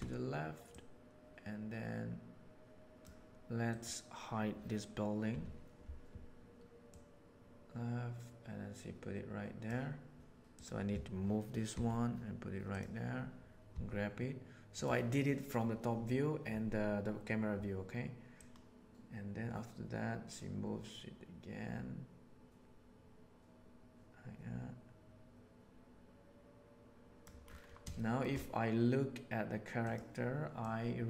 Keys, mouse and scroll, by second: 0.7 right click, 1.2-3.0 right drag, 3.7 right click, 5.3 h, 11.7 g, 13.7 g, 18.4-21.3 right drag, 27.9-28.3 shift+middle drag, 29.8 right click, 30.6-31.0 right drag.